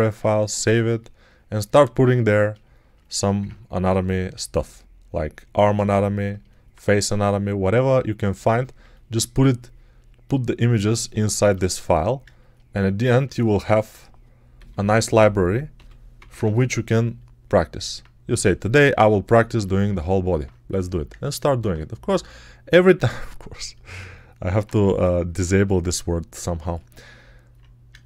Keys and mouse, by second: 13.5-15.6 alt+right drag, 14.4 f, 15.6-19.2 middle drag, 15.6 g, 16.0 ], 16.2 ], 24.6 1.